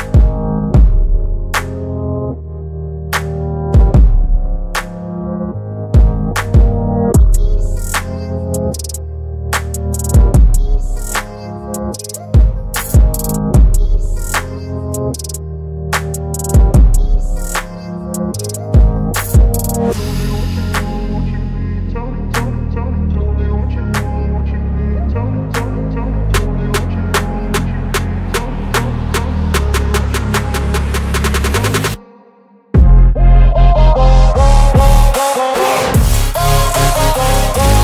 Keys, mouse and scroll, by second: 1.9 Up, 6.3 Up, 6.3 click, 9.4 BackSpace, 11.6-13.4 alt+drag, 17.4 ctrl+t, 18.4-19.4 drag, 23.0 shift+click, 29.5 ctrl+g, 30.4 click, 32.0 shift+s, 34.2-35.2 typing, 36.5 Return.